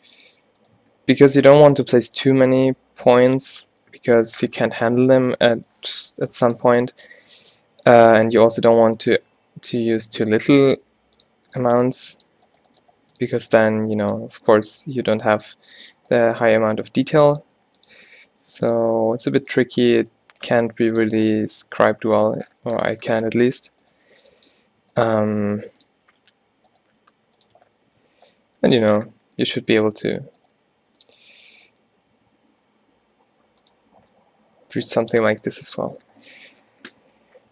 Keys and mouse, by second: 1.4 g, 2.3 g, 3.7 Tab, 4.8 Tab, 5.9 x, 7.4 e, 8.6 e, 10.2-11.2 drag, 10.2-14.3 typing, 15.3 click, 16.5 g, 17.6 e, 18.0 e, 18.9 e, 20.1 click, 20.3 g, 21.3 Tab, 21.8 Tab, 22.3 a, 24.0 g, 25.4 g, 26.9 g, 27.7 Tab, 28.0 Tab, 28.4 a, 28.6 a, 30.6 g, 31.8 g, 33.6 click, 34.2 middle click, 36.1 a.